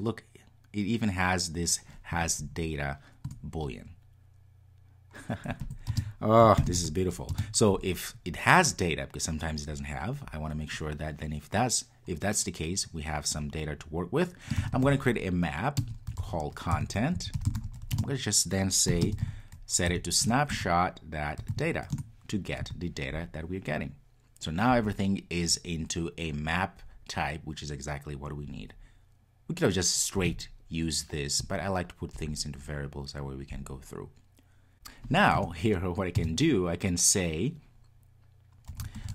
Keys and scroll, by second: 3.3 Return, 20.3 Return.